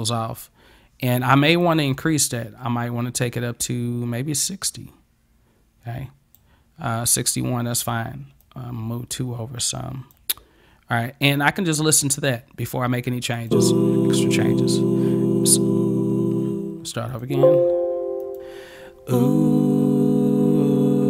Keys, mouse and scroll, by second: 1.7-6.4 drag, 8.5-10.1 drag, 13.4 click, 17.1 click, 18.3 click.